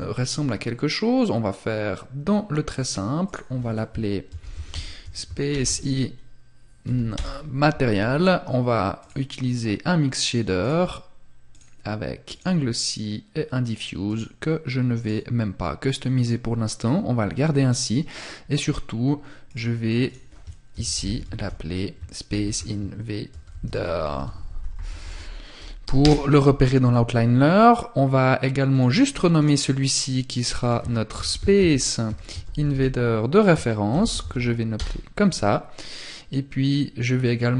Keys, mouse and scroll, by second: 13.2 click, 18.6 click, 27.9 click, 28.6 right click, 29.6 click, 37.4 click.